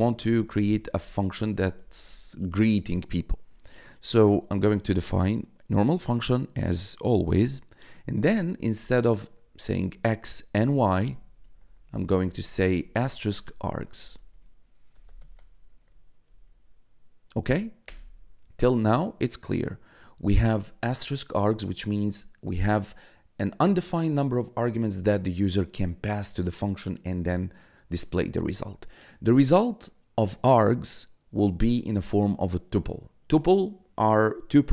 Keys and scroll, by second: 0.0-1.2 typing, 2.4 shift+9, 9.1-11.3 typing, 12.6-16.2 typing, 17.8 Return, 18.3 Tab.